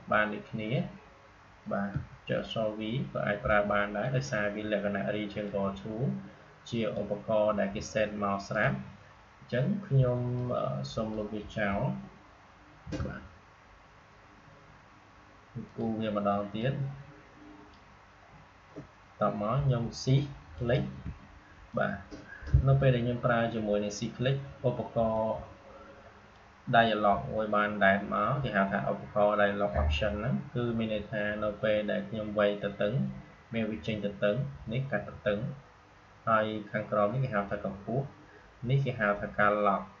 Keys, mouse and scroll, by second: 1.8 v, 3.4-12.7 drag, 12.7 Delete, 15.6-25.0 drag, 25.0-40.0 drag.